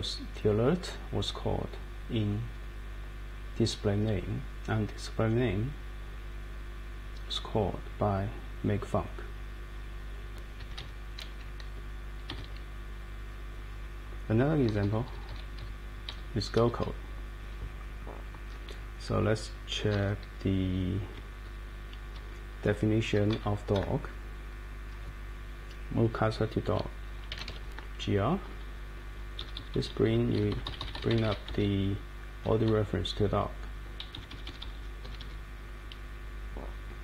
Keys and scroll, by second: 10.6 Escape, 10.8 Escape, 12.3 super+Right, 14.6 Page_Up, 15.3 Page_Up, 15.6 Page_Down, 16.1 Page_Up, 16.8 Up, 17.4 Up, 17.7 Up, 17.8 Up, 17.9 Up, 18.5 Up, 22.7 Up, 23.3 Down, 23.7 Right, 24.3 Right, 24.8 Right, 27.0-27.9 typing, 28.4 Down, 28.7 Down, 28.9 Down, 29.4 Up, 30.0 Up, 30.3 Down, 30.9 Down, 31.4 Up, 34.3 Up, 35.0 Escape.